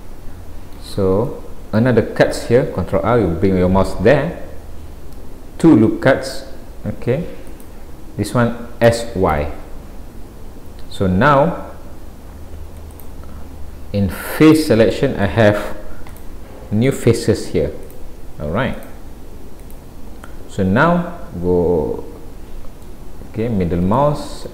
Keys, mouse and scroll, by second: 1.0-1.3 scroll down 2, 1.3 middle click, 2.8 ctrl+r, 14.5 click, 14.9 middle click, 16.1 click, 16.9 click, 17.9 click, 18.8 click, 19.7 click, 20.3 middle click, 23.4-23.8 scroll up 1, 24.0 shift+middle click.